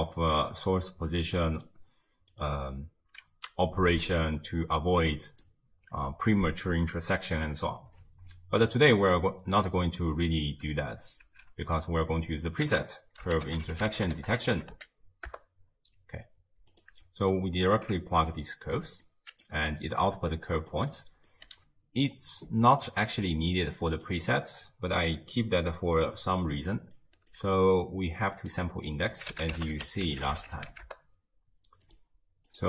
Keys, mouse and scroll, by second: 0.0 click, 5.5 click, 11.3 ctrl+x, 12.7 ctrl+a, 17.3-18.3 alt+right drag, 18.3 click, 19.0-20.2 middle drag, 20.2-21.5 typing, 20.3 click, 20.9 right click, 23.2 d, 23.5 click, 24.1 d, 25.2 d, 26.8 d, 27.0 right click, 27.3 d, 28.5 drag, 32.5-32.6 drag.